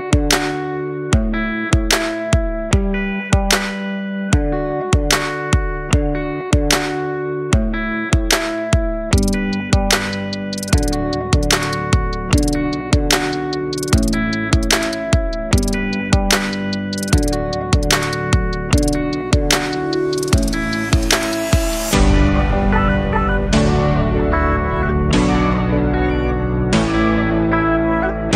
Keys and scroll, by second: 22.7 super+o, 23.7 space.